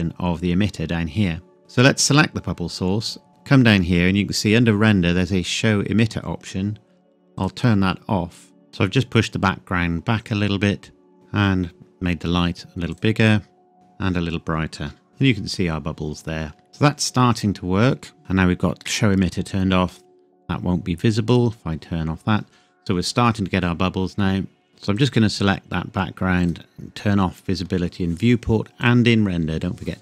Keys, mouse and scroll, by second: 1.6 click, 2.5-3.7 scroll down 1, 7.3 click, 11.1 click, 13.7 KP_Enter, 15.1-16.7 scroll up 1, 17.5-18.2 scroll down 1, 18.2-19.0 scroll up 1, 21.3 click, 24.9 click, 28.8 click.